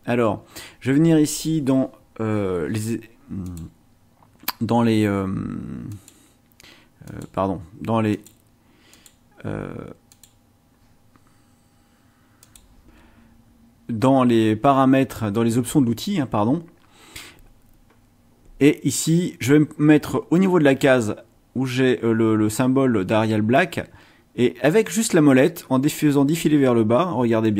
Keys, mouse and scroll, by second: 3.4 click, 5.9 click, 7.0 click, 8.1 click, 8.9 click, 10.1 click, 12.4 click, 27.4 click.